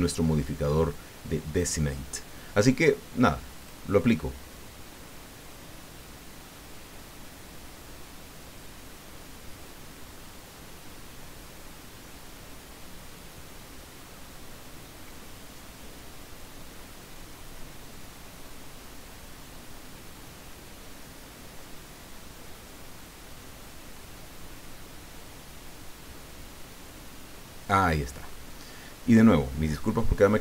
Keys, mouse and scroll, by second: 3.6 click, 28.3 middle click, 29.1 click.